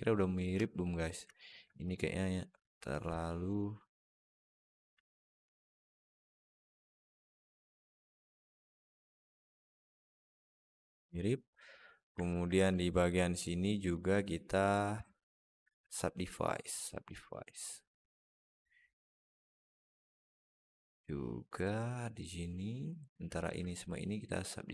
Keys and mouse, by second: 0.3 Tab, 1.2 alt+shift+middle click, 1.7 click, 2.5 click, 3.9 click, 4.9 alt+shift+middle click, 5.3 alt+z, 5.8-6.9 middle drag, 7.3 Tab, 7.7-9.0 middle drag, 9.9-10.4 alt+middle drag, 12.1 alt+middle click, 12.4 Tab, 12.8 click, 13.7 shift+click, 15.0 alt+shift+middle click, 17.7-20.2 drag, 22.1 click, 23.2 shift+click.